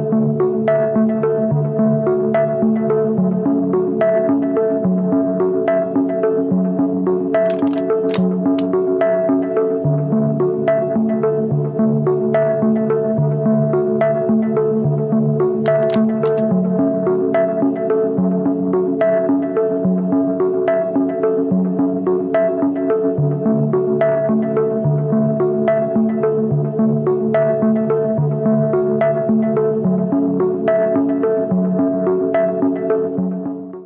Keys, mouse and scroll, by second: 12.2 double click.